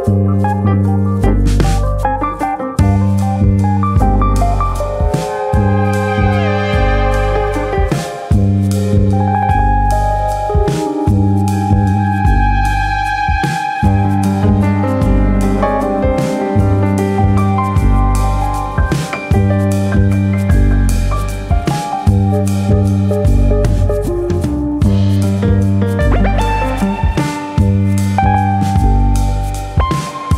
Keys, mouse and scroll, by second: 0.1 middle click, 1.4 shift+middle click, 1.8-2.9 scroll down 11, 2.3 middle click, 3.0 shift+middle click, 3.3 middle click, 3.6 shift+middle click, 3.9-4.4 scroll up 3, 4.2 middle click, 5.1 middle click, 5.5 shift+middle click, 6.0 1, 6.4 click, 6.7 middle click, 7.4 click, 8.5 2, 8.8 alt+click, 9.1 middle click, 9.9 shift+click, 10.3 shift+middle click, 11.2 ctrl+click, 11.6 alt+shift+click, 12.7 middle click, 13.4 ctrl+e, 14.2-14.9 shift+scroll down 2, 14.3 shift+middle click, 14.9 middle click, 15.5 middle click, 15.6 shift+middle click, 16.0-16.5 scroll down 2, 16.3 shift+middle click, 16.5 middle click, 17.1 shift+middle click, 17.4-17.7 scroll up 2, 17.7 middle click, 18.1 shift+middle click, 18.8 alt+click, 19.5 alt+shift+click, 19.8 middle click, 20.5 middle click, 21.1 shift+middle click, 21.5-21.9 scroll down 2, 21.7 shift+middle click, 21.9 shift+middle click, 22.0 middle click, 22.6 ctrl+e, 23.5 middle click, 23.8 shift+middle click, 24.2 middle click, 24.8-25.2 scroll up 2, 25.5 alt+click, 27.2 scroll down 2, 27.6 middle click, 28.7-29.5 scroll down 1, 29.5 middle click, 29.5-30.1 scroll down 1.